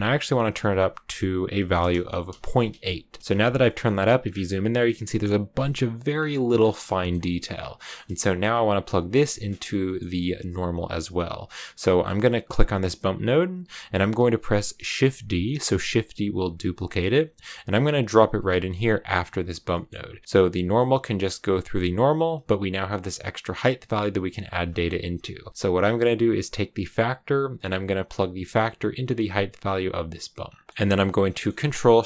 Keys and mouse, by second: 0.3-2.6 drag, 3.5 shift+middle click, 6.8 shift+middle click, 6.9 shift+click, 7.9 click, 8.3 click, 9.8 click, 12.3 click, 16.5 shift+d, 18.7 click, 19.2 click, 19.6 click, 22.8-25.1 drag, 27.2-29.5 drag, 31.3 click.